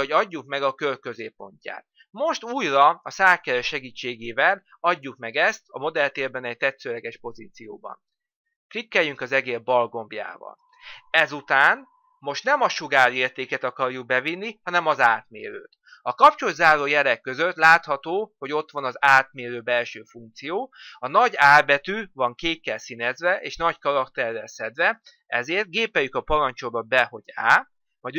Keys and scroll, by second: 26.0 á.